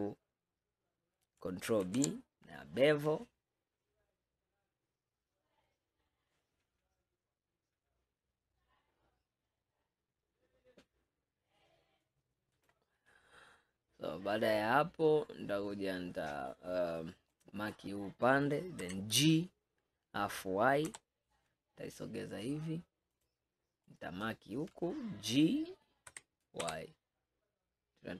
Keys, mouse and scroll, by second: 1.9 ctrl+b, 17.4 click, 18.9 g, 24.0 click, 26.2 g.